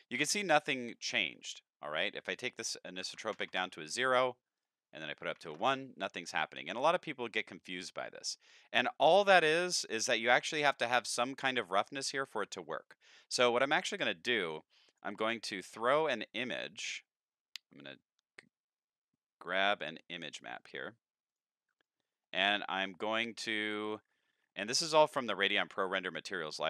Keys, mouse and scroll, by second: 0.4 middle click, 1.1 shift+middle click, 2.3 click, 4.6 click, 7.0-8.0 middle drag, 8.6-9.8 middle drag, 11.9 click, 13.3 click, 13.6 middle click, 14.9 click, 15.3 shift+a, 20.3 click, 21.3 click, 21.8 click, 23.1 click, 24.0 middle click, 24.4 middle click, 25.2-26.3 scroll down 4.